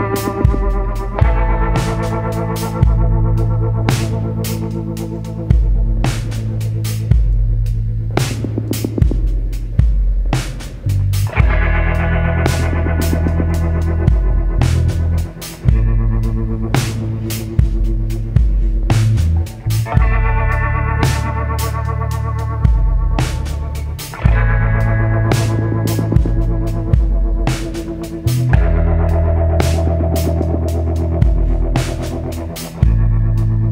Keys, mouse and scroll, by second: 0.2-12.1 shift+drag, 12.1-18.5 drag, 18.5 right click, 23.1-33.7 drag.